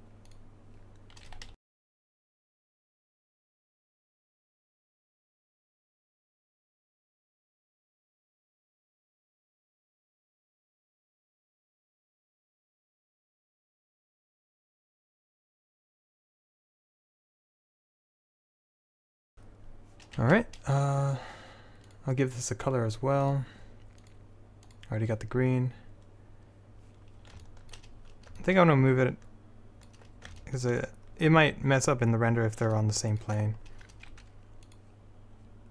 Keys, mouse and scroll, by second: 1.4-3.3 typing, 4.3 click, 5.5 Tab, 7.4-9.9 drag, 9.9 middle click, 10.1 click, 10.7 middle click, 11.5-18.4 typing, 16.5 click, 16.9 click, 18.1 click, 19.0 Tab, 20.3 z, 22.1 click, 22.5-23.5 drag, 34.8-35.7 drag.